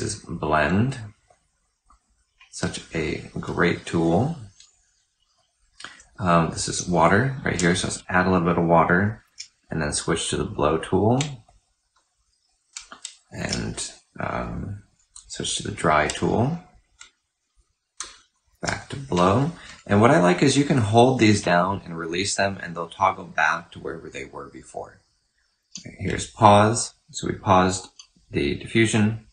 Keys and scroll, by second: 6.5 typing, 9.2 typing, 13.2 typing, 14.7 typing, 16.9-18.9 typing, 22.5 typing, 25.5 typing, 27.7 typing.